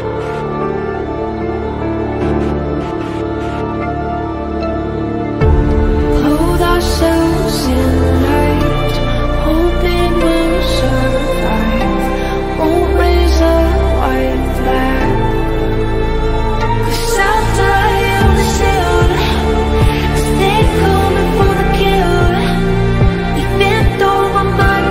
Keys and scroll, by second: 1.4 F3, 2.2 shift+F2, 2.8 F3, 2.9 Escape, 4.1 F3, 5.2 shift+F2, 5.5 shift+Page_Up, 5.8 F3, 10.1 shift+F2, 10.3 F3, 13.6 shift+F2, 13.7 F3.